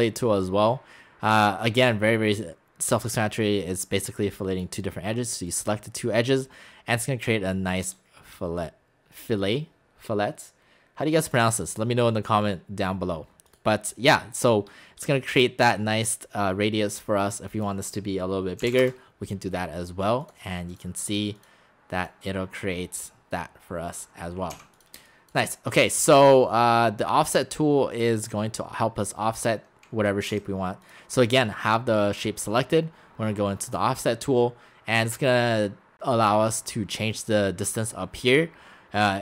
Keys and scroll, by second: 18.6 typing, 24.6 x, 25.0 space, 30.3 x.